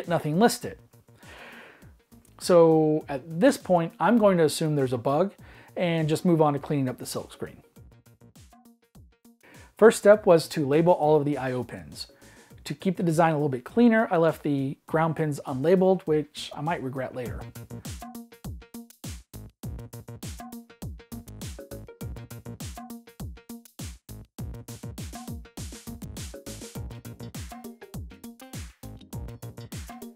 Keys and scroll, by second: 2.0-2.9 typing, 4.6-5.3 typing, 8.2 Escape, 11.6-13.9 typing, 14.6 Delete, 15.0 super+d, 15.5 super+d, 16.1 super+d, 16.5 super+d, 16.9-22.1 typing, 17.1 super+d, 17.7 super+d, 23.3 super+d, 23.5-30.1 typing, 24.5 super+d, 27.5 super+d.